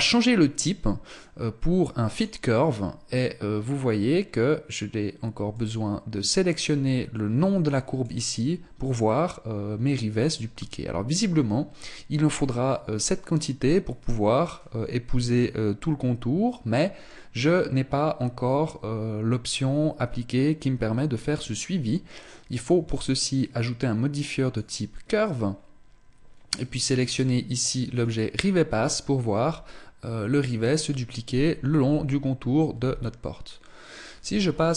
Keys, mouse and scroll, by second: 0.6 click, 3.7-4.3 scroll down 1, 4.3-4.8 scroll down 1, 4.8 click, 8.4-9.7 scroll down 5, 9.7-12.5 scroll down 1, 16.5 scroll up 2, 22.4 click, 24.9 scroll down 5, 26.7 click, 28.5-29.1 scroll up 6, 32.3 z.